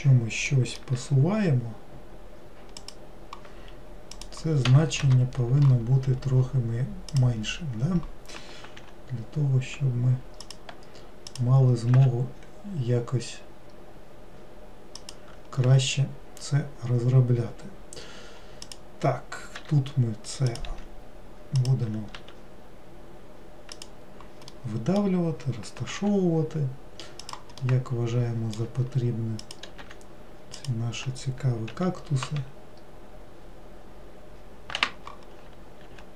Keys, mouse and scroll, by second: 1.1 g, 4.3-8.9 drag, 8.9 g, 11.4 click, 18.8 click, 24.7-26.1 middle drag, 26.1 g, 27.7-29.5 middle drag, 29.5 click.